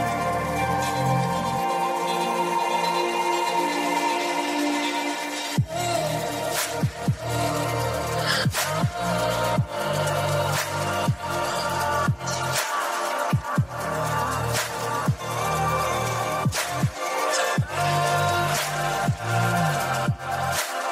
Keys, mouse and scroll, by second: 2.2-3.4 drag, 4.2 click, 4.8-9.8 right drag, 9.8 click, 10.5-11.8 right drag, 12.5 click, 13.0-14.2 right drag, 15.8 click, 16.1 right click, 17.9-18.9 scroll down 2.